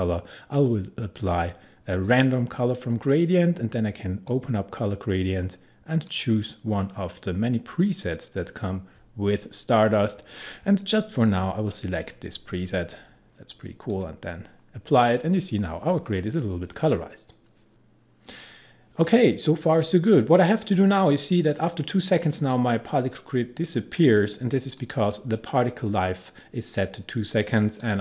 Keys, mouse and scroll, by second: 11.5-12.0 scroll down 1, 12.0 click, 17.7 click, 19.6-24.8 drag, 27.8 click.